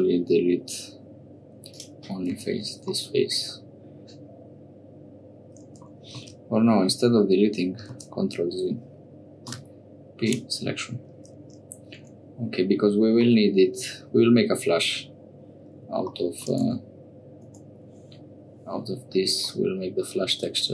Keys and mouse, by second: 2.3 Tab, 2.9 middle click, 3.5-5.8 middle drag, 7.2 ctrl+z, 7.9 ctrl+z, 9.4 p, 12.0 Tab, 13.3 middle click, 16.6 Tab, 17.4 Tab, 19.5 middle click.